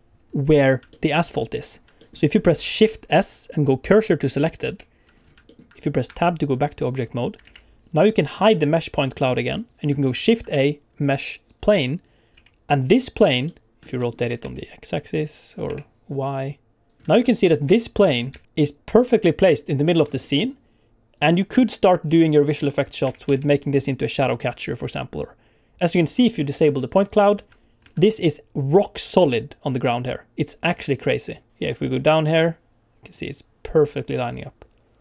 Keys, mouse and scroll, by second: 0.2 scroll up 3, 0.8 shift+middle click, 1.6 scroll up 2, 1.9 shift+middle click, 2.8 shift+s, 5.1 scroll down 2, 5.4 shift+middle click, 6.8 Tab, 7.4 alt+a, 9.5 click, 10.1 shift+a, 12.3 s, 13.1 click, 13.4 middle click, 13.8 middle click, 13.8 scroll down 2, 13.9 shift+middle click, 13.9 middle click, 14.1 r, 14.4 x, 15.6 y, 16.8 click, 16.9 r, 17.0 shift+middle click, 17.0 scroll up 1, 17.2 middle click, 17.6 g, 17.9 z, 18.2 z, 19.7 shift+click, 20.0 scroll down 2, 20.1 middle click, 21.1 click, 21.8 scroll up 1, 22.0-22.7 scroll down 2, 22.7 scroll up 2, 23.0 r, 23.2 z, 23.4 z, 24.4 click, 25.2 click, 26.8 click, 27.3 space, 27.8 space, 28.3 click.